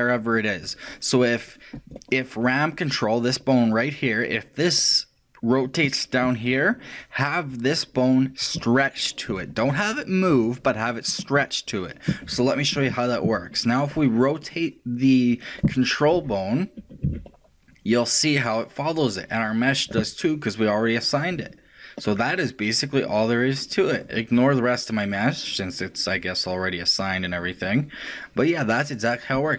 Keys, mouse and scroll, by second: 1.8-4.7 right drag, 14.5 right click, 16.1 r.